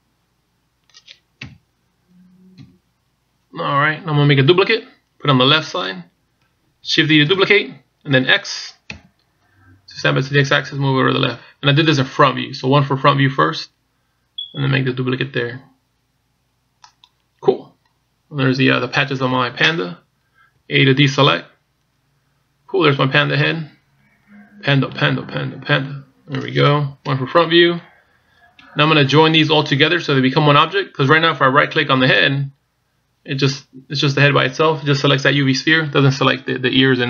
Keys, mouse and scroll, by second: 2.2 KP_3, 3.3 KP_1, 8.3 shift+d, 21.4 a, 22.6-23.2 scroll down 3, 23.1-23.7 scroll up 2, 23.7 scroll down 1, 23.7-24.2 scroll down 1, 24.2 middle click, 27.8 KP_1, 32.8 right click.